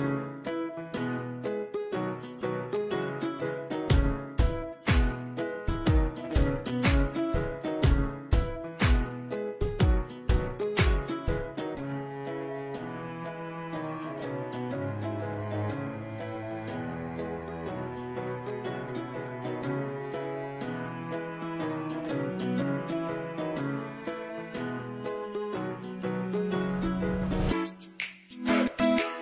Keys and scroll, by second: 4.0 Delete, 5.4 ctrl+alt+o, 9.7 ctrl+a, 26.0 KP_8, 26.2 KP_2, 26.4 KP_0.